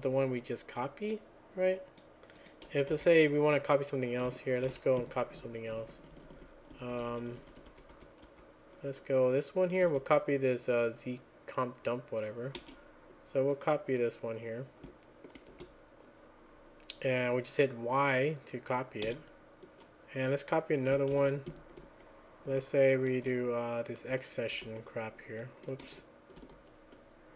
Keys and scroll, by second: 4.7 ctrl+a, 4.7-8.3 typing, 5.0 Escape, 9.8 typing, 11.1-11.8 typing, 16.7 shift+4, 21.1 ctrl+a, 21.1-24.6 typing, 21.5 Escape, 25.8-26.4 typing.